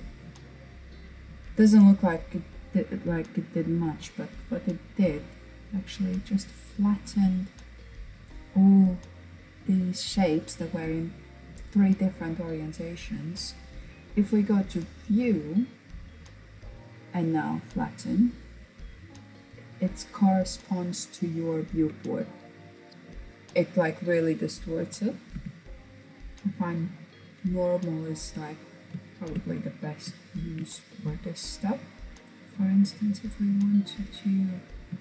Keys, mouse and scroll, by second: 2.8-5.8 middle drag, 5.9-7.6 scroll down 1, 7.6-8.9 scroll down 1, 13.7-16.3 drag, 16.7-19.8 drag, 21.3-22.9 middle drag, 24.4 ctrl+z, 24.8 ctrl+z, 25.6-26.8 drag, 26.8-28.1 scroll down 2, 28.1-31.2 shift+middle drag, 31.2-31.7 scroll up 1, 31.7-33.1 shift+middle drag, 33.1 click, 34.4 shift+click.